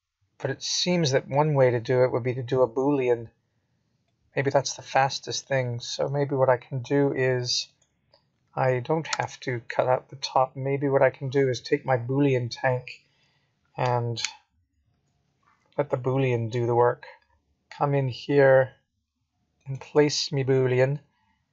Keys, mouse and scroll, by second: 0.0 Tab, 0.7 middle click, 3.3 middle click, 4.8 scroll up 2, 5.7 middle click, 7.0 scroll up 2, 8.0 scroll down 1, 8.8 middle click.